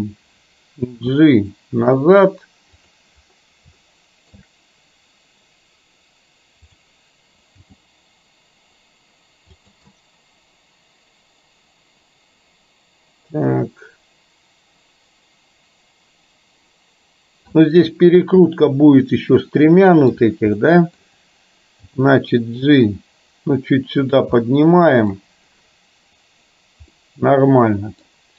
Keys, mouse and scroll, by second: 1.0 g, 3.9 shift+middle click, 7.8 g, 10.0-17.5 middle drag, 18.7-20.2 middle drag, 20.7 middle click, 21.9 g, 24.4-25.3 middle drag, 27.0-28.2 middle drag.